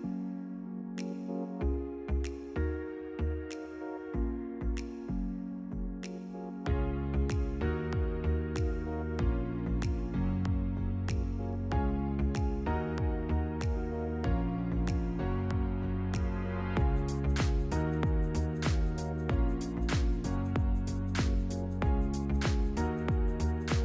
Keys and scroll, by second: 2.0 Delete, 5.8 Delete.